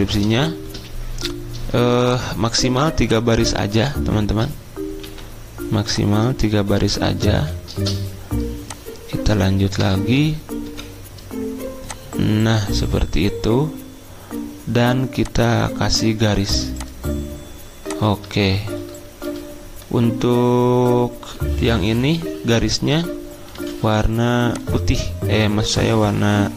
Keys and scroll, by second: 0.3 space, 5.0 t, 7.3 ., 9.8 BackSpace, 10.6 Escape, 19.2 d, 23.5 i.